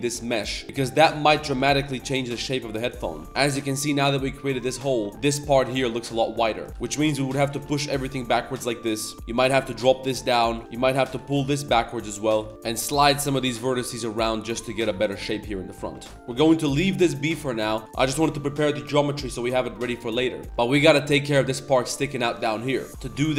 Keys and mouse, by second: 0.2 shift+click, 0.6 shift+click, 1.2-3.2 typing, 1.8 Tab, 3.0 click, 3.2 Tab, 5.0 Tab, 6.2 Tab, 6.7 z, 6.7 a, 6.7 b, 6.7 g, 9.1 Tab, 9.1 2, 10.6 2, 10.6 KP_7, 11.1 g, 12.3 middle click, 12.5 ctrl+z, 12.5 middle click, 12.8 g, 13.8 s, 14.6 middle drag, 15.0 middle click, 15.2 Tab, 15.3 middle drag, 15.7 middle click, 15.9 Tab, 16.1 Tab, 16.1 ctrl+z, 16.5 middle drag, 16.9 middle click, 17.4 middle click, 17.8 middle click, 18.2 middle click, 19.3 middle drag, 20.1 middle click, 20.4 Tab, 20.4 ctrl+s, 20.4 KP_7, 20.4 z, 22.5 shift+click, 22.8 Tab, 22.9 z, 22.9 2.